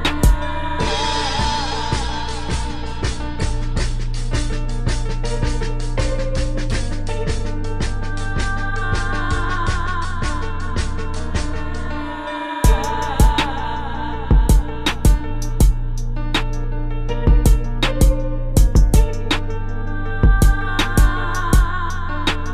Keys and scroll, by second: 4.1 space, 6.2 space, 7.6 space, 8.7 space, 11.2 space, 18.2 space, 20.6 space.